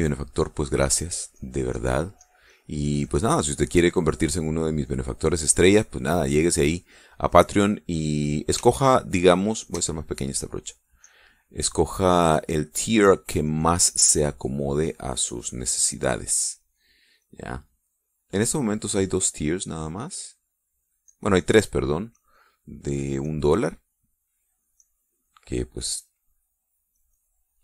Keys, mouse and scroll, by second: 0.0 click, 1.4-2.9 drag, 3.0-4.6 drag, 5.0 click, 6.3 click, 7.5 click, 9.4-10.6 shift+drag, 11.2-12.4 drag, 12.6-15.1 drag, 15.2 click, 16.0-20.0 drag, 20.2 click, 21.6-23.4 drag, 23.8-25.3 drag, 25.4-26.7 drag.